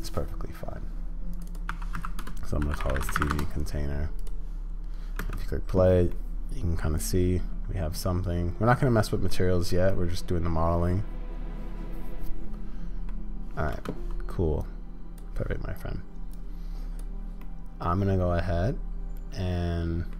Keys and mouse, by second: 1.3-5.2 drag, 5.2 space, 6.1-8.2 drag, 8.2-9.3 middle drag, 9.9-13.1 middle drag, 13.7 space, 14.6-17.4 drag, 17.4-20.1 middle drag.